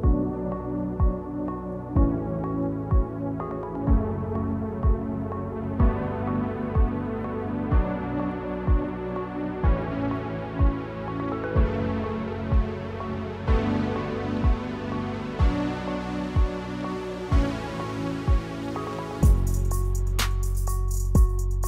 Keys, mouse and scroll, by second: 0.3 scroll down 1, 0.6 click, 1.0 e, 2.6 r, 3.5 g, 5.3 e, 7.1 g, 8.6 s, 11.1 middle click, 12.5 scroll up 5, 12.6 middle click, 13.1 shift+middle click, 13.3 middle click, 13.6 shift+middle click, 13.8-15.0 scroll up 6, 14.0 shift+middle click, 14.2 shift+middle click, 14.8 shift+middle click, 15.2 right click, 15.8 right click, 17.4 shift+middle click, 19.2 click, 20.2 scroll down 1, 20.5-21.6 scroll up 1.